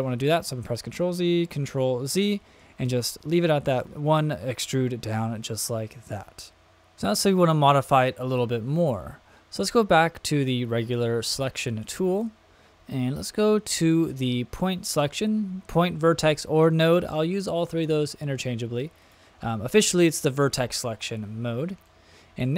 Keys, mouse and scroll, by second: 0.1 super+z, 1.5 super+z, 2.2 middle click, 3.8 middle click, 11.8 click, 19.0 click, 21.8 middle click.